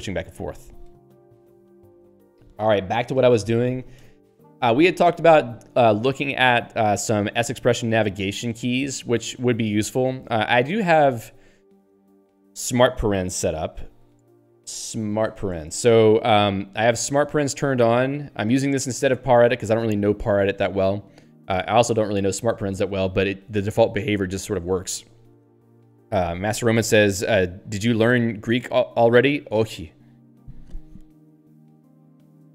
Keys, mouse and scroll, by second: 3.8 click, 3.9 click, 7.8 ctrl+n, 10.0 ctrl+p, 11.0 ctrl+f, 13.8 ctrl+n, 14.3 Return, 14.6 ctrl+s, 14.9-15.8 typing, 17.3 ctrl+n.